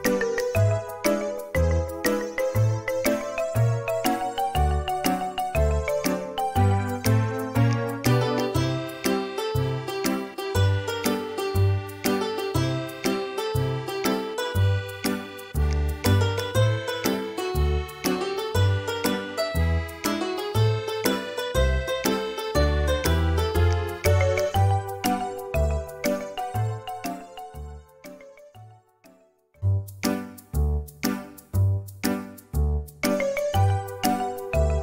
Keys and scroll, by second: 5.3 4, 8.7 4, 13.8 Delete, 17.6 m, 30.9 space.